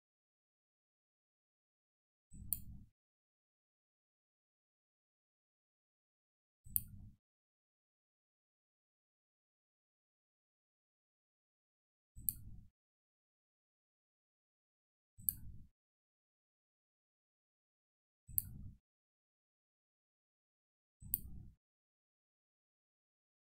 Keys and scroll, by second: 22.9 ctrl+z.